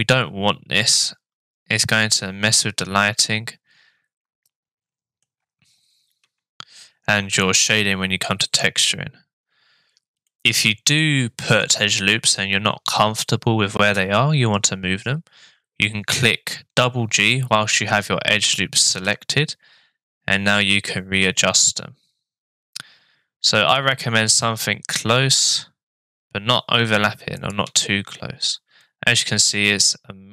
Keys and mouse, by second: 1.1-5.2 middle drag, 6.2 Tab, 7.4 middle click, 10.3 middle click, 18.8 g, 27.7 Tab, 28.8-30.3 middle drag.